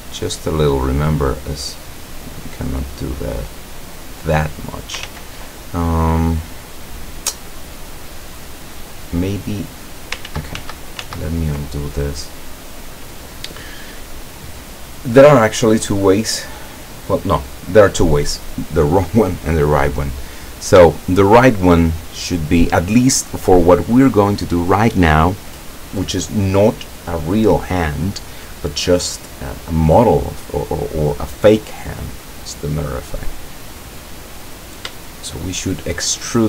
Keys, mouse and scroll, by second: 0.5 right click, 1.7-5.0 drag, 5.1 ctrl+z, 6.0-6.4 ctrl+scroll up 2, 6.7 scroll down 2, 10.3 ctrl+z, 20.5-20.9 scroll up 1, 21.0-21.8 shift+middle drag, 23.5-23.8 scroll down 2, 33.5-34.1 scroll up 2, 34.3-35.0 middle drag, 35.9 shift+scroll up 2, 36.0 shift+middle click, 36.3-36.4 shift+middle drag.